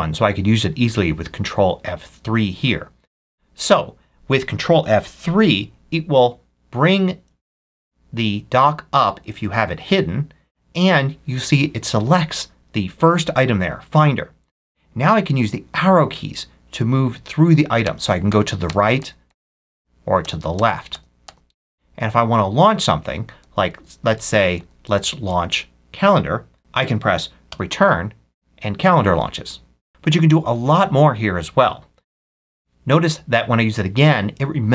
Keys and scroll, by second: 7.0 ctrl+F3, 17.7 Right, 20.1 Left, 23.3 Right, 24.5 Right, 25.2 Right, 27.4 Return, 32.2 ctrl+F3.